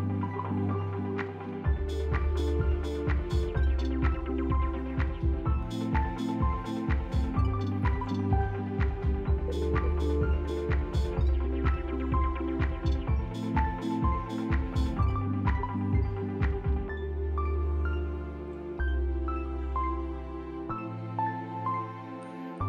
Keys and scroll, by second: 1.4 f, 1.6 b, 9.4 f, 14.3 f, 14.7 e, 15.1 ctrl+z, 15.8 q.